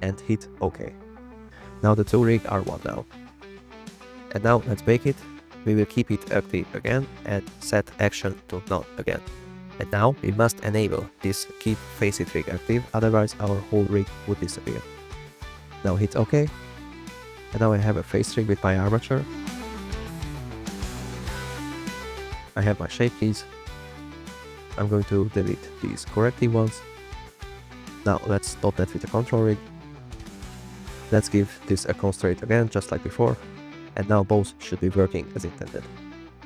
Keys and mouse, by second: 5.6-17.7 drag, 18.8 click, 19.4 click, 19.7 drag, 19.9 g, 20.2 click, 21.4 click, 22.2 click, 23.0 click, 24.8 click, 25.3 click, 26.0 click, 27.3 click, 28.4 drag, 29.7-31.0 drag, 31.7-32.1 drag, 32.1 click, 32.4 click, 32.7 click, 34.1 click, 34.4 click, 34.6 click, 35.0 click, 35.1 middle click, 35.8 click, 36.1 click, 36.4 click.